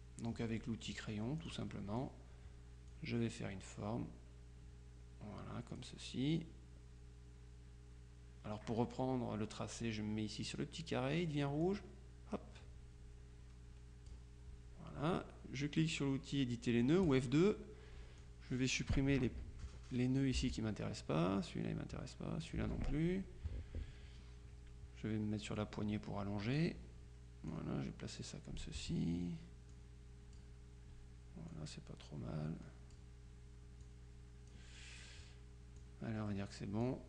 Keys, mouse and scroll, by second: 1.5 click, 3.0-6.4 drag, 11.7-14.7 drag, 17.1 click, 18.3 click, 20.5 Delete, 22.5 click, 22.7 Delete, 25.7 click, 27.6-29.2 drag, 29.8 click, 31.6-33.5 drag, 34.0 click, 35.9-37.0 drag.